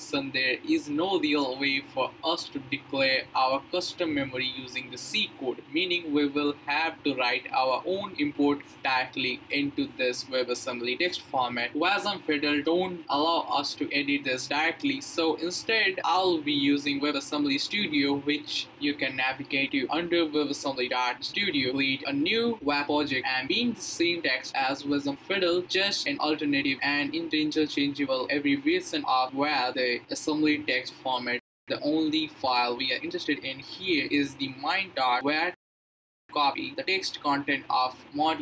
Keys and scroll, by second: 16.4-17.7 typing, 18.8 Return, 19.2 Return, 37.5 super+c.